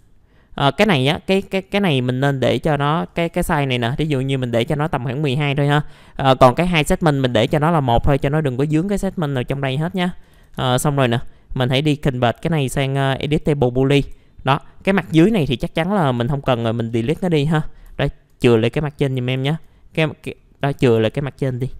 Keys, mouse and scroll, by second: 0.9 click, 2.1 middle click, 3.1 click, 3.7 KP_1, 3.8 KP_2, 7.1 right click, 8.8 middle click, 9.0-9.3 scroll down 1, 9.6 alt+middle click, 10.3 alt+f, 10.6 alt+z, 10.8-11.6 scroll down 2, 11.1 middle click, 11.6 right click, 13.3 click, 14.5-15.2 scroll up 1, 15.2-15.5 scroll up 3, 15.5 click, 16.2 alt+middle click, 17.1 alt+Delete, 18.0 alt+middle click, 18.9 click, 19.4 alt+middle click, 20.4 alt+middle click, 20.9 alt+middle click, 21.0 scroll down 1, 21.2 scroll up 1, 21.4 scroll down 1, 21.5 scroll up 1, 21.6 scroll down 1, 21.7 scroll up 1.